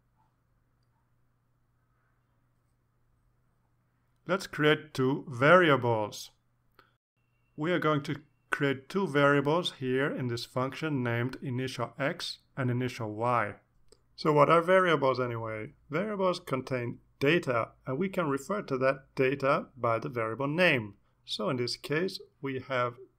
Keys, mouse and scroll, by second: 1.8 click, 3.0 click, 4.3 Return, 4.6 Return, 5.1-12.6 typing, 10.3 Return, 13.4 Up, 13.6 Right, 13.8 Left, 14.0 space, 14.5 =, 14.5 space, 17.7 space.